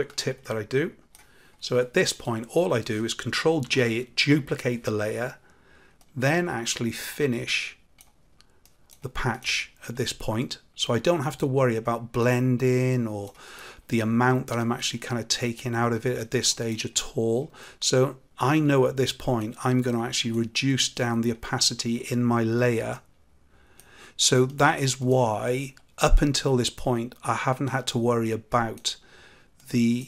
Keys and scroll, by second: 3.6 ctrl+j.